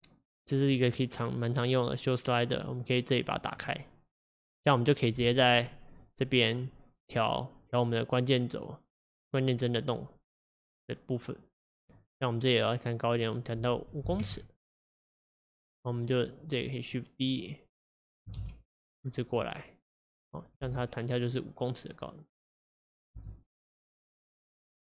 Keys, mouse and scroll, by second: 5.8 middle click, 6.1-9.6 drag, 9.6-11.0 scroll down 1, 11.0-18.4 drag, 18.4 shift+d, 20.7 space, 23.2 space, 23.7-24.8 drag.